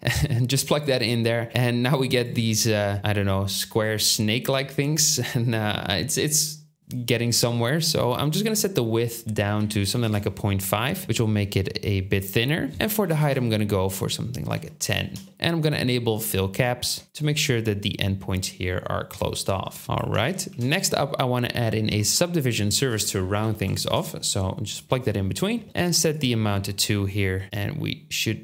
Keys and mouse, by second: 0.2-2.8 drag, 2.8-6.0 middle drag, 12.2-12.8 middle drag, 15.8 click, 16.4 ctrl+middle click, 16.8 ctrl+click, 17.0-19.4 middle drag, 19.8 space, 20.6 shift+a, 23.6 Down, 24.8-25.4 drag, 25.6 shift+click, 26.2-28.4 middle drag.